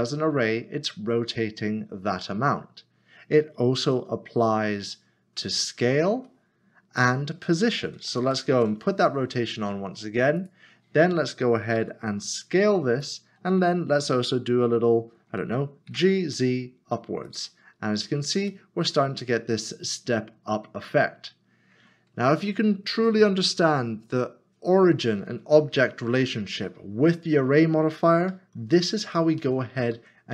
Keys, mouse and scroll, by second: 3.8 ctrl+z, 8.2 ctrl+shift+z, 10.4 click, 13.0 click, 15.9-16.2 typing, 17.3 click, 17.8 scroll down 1, 18.5 middle click, 22.9 middle click, 28.3 middle click, 28.6 ctrl+z.